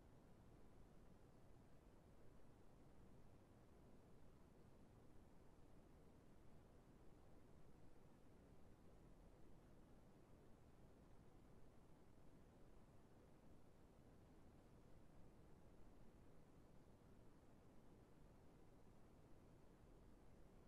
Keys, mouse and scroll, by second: 12.8 middle click, 13.0-13.7 scroll down 1, 14.6 right click, 18.9 right click.